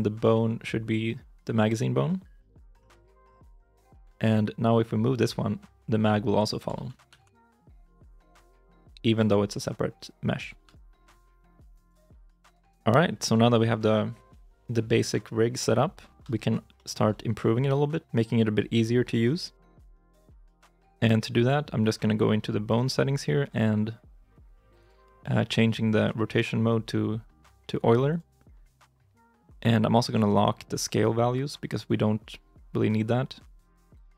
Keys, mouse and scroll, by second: 4.2 ctrl+Tab, 4.2 right click, 5.0 g, 6.6 ctrl+z, 6.9 r, 10.5 ctrl+z, 11.0 r, 11.9 ctrl+z, 16.6 shift+middle click, 17.9-18.3 scroll up 1, 18.6 shift+middle click.